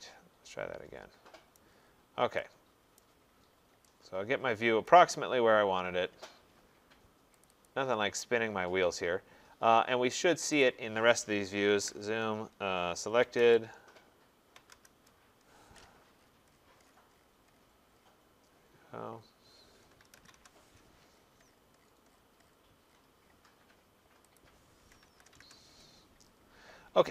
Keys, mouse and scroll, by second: 0.7 scroll, 1.6 right click, 1.8 middle click, 1.9 middle click, 3.0 right click, 3.3 middle click, 3.4 middle click, 3.5 middle click, 5.0 right click, 5.1 middle click, 5.7 middle click, 6.3 middle click, 7.7 click, 10.6 click, 11.7 typing, 11.9 Return, 13.2 typing, 13.4 Return, 14.6 typing, 14.7 Return, 16.2-17.6 middle click, 17.5 middle click, 17.9-18.4 scroll, 19.2-19.7 scroll, 19.8-20.9 typing, 21.1-22.2 scroll, 22.0-22.8 typing, 22.4 middle click, 22.5-23.1 middle click, 22.9 middle click, 24.4 click, 25.1-27.1 typing.